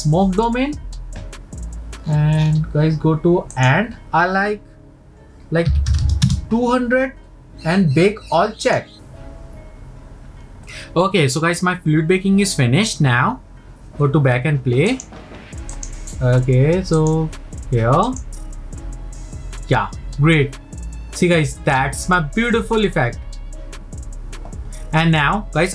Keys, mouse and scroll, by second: 0.0 click, 2.1-2.8 scroll down 15, 3.5-6.0 drag, 6.0 KP_0, 8.6 click, 14.9-17.1 drag, 18.1-21.3 drag.